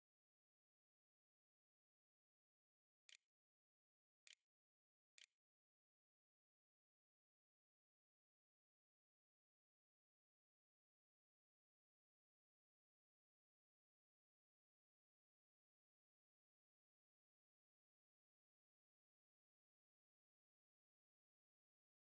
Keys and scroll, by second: 1.8-6.6 typing.